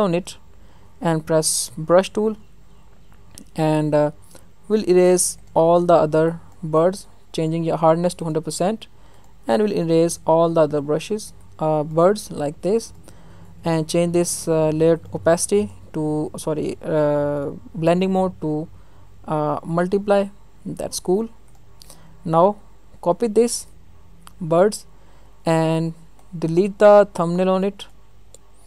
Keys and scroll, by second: 23.7 ctrl+j.